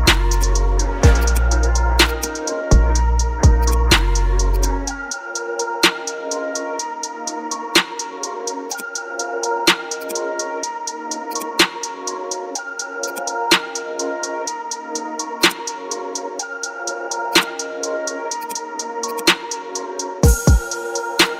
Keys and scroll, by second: 3.5 space, 5.3 ctrl+KP_Add, 6.4-7.2 typing, 12.8 space, 18.9 space, 20.2 ctrl+KP_Subtract, 21.0 ctrl+d.